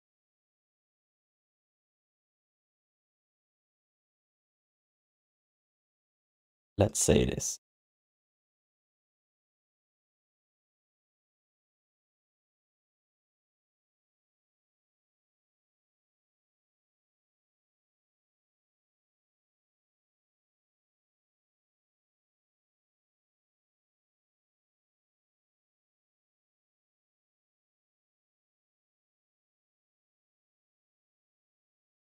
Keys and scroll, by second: 10.8 1, 12.4 1, 15.4 alt+shift+d, 15.7 ctrl+s, 17.7-20.8 typing, 23.4 ctrl+s.